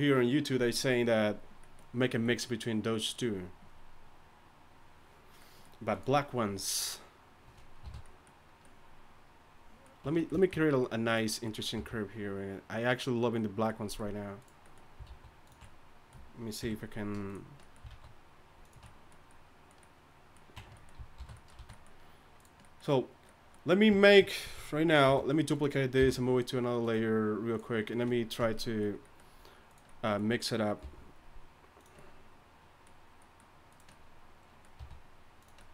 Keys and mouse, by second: 3.0-5.4 right drag, 7.8 shift+h, 10.0 Tab, 11.2 click, 11.8 g, 14.4 click, 15.1 alt+s, 16.6 KP_3, 17.9 alt+s, 20.6 Tab, 21.2 alt+h, 21.6 a, 22.4-24.7 drag, 25.0 shift+d, 26.0 m, 28.4 Tab, 30.8 g, 33.7-35.7 drag, 34.8 r.